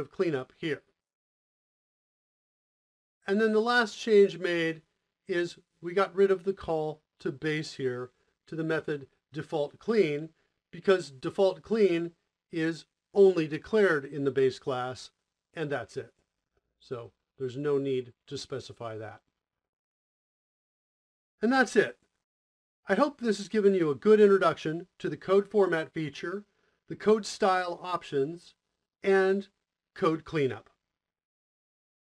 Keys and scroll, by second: 10.8 Tab, 11.6 Tab, 15.3 Tab, 16.0 Tab.